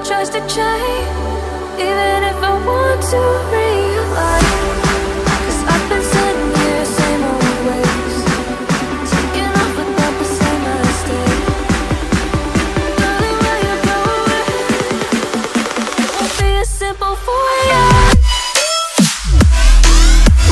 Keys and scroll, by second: 1.5 ctrl+z, 1.9 ctrl+z, 4.6 ctrl+z, 15.2 ctrl+z, 18.6 ctrl+z.